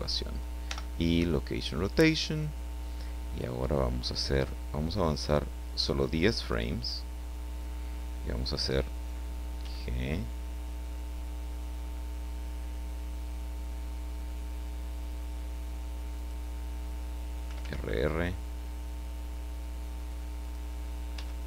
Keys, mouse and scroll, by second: 0.6 i, 1.2 click, 6.0 click, 9.6 g, 16.1 click, 17.4 r, 20.4 click, 21.1 g.